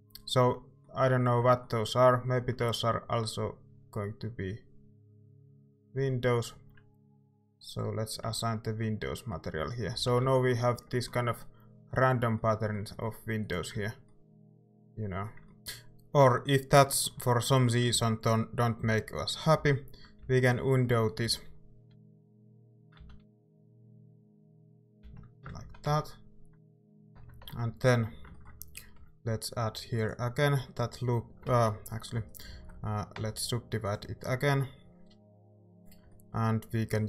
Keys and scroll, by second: 2.4 e, 8.3 Tab, 9.6 a, 9.9 a, 10.2 ctrl+s, 13.8 Tab, 15.5 Tab, 17.9 ctrl+z, 18.8 ctrl+z, 19.6 ctrl+z, 20.2 ctrl+z, 21.3 ctrl+z, 25.7 ctrl+shift+z, 25.9 ctrl+shift+z, 26.7 ctrl+z, 27.5 Tab, 28.9 ctrl+r, 31.6 ctrl+z, 33.2 w.